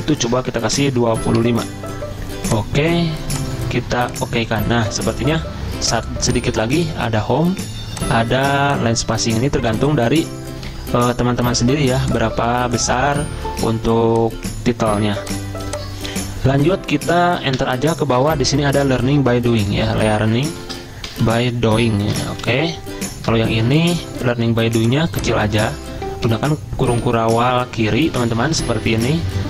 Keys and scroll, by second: 1.1-1.5 typing, 10.5-11.5 typing, 17.6 shift+Return, 19.1-23.2 typing, 23.5 ctrl+shift+Up, 24.0 ctrl+shift+Down, 25.2-26.0 typing, 26.4 ctrl+[, 26.5 ctrl+[, 26.9 ctrl+[, 27.0 ctrl+[.